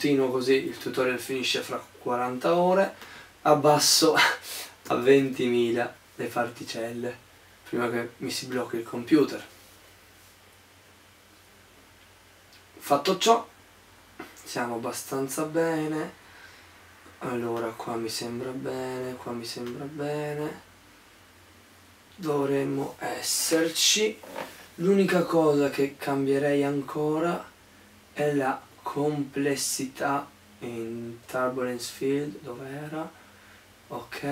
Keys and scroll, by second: 3.6-5.9 typing.